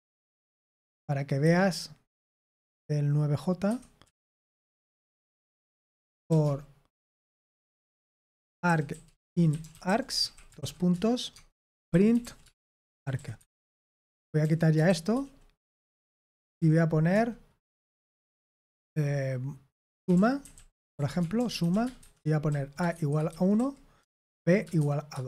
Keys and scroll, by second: 0.1 d, 1.4 Escape, 2.5-6.7 typing, 8.2-15.3 typing, 16.5-17.1 typing, 19.8-24.7 typing.